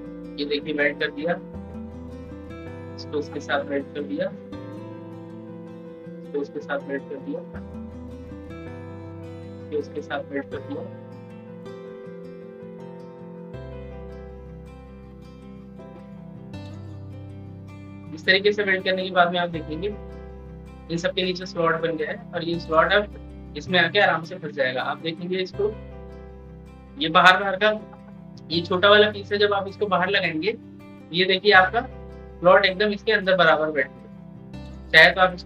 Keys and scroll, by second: 30.2-32.2 ctrl+scroll down 1.